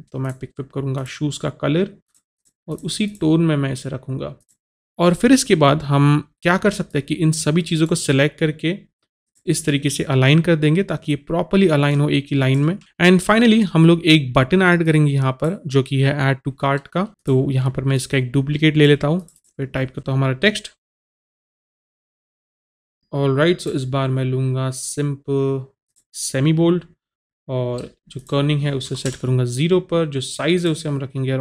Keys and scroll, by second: 22.2-23.0 typing, 29.1 KP_0.